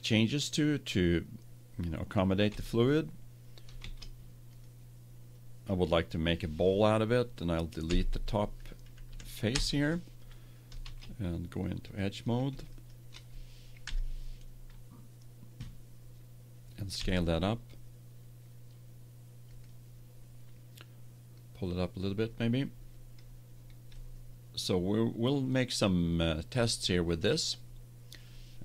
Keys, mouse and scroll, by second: 0.2-2.0 right drag, 2.4 Tab, 3.7 ctrl+Tab, 7.3 right click, 7.8 Delete, 9.0 Down, 10.7 ctrl+Tab, 12.6-14.2 drag, 13.8 KP_1, 16.9 s, 21.3-23.3 drag, 23.9 middle click.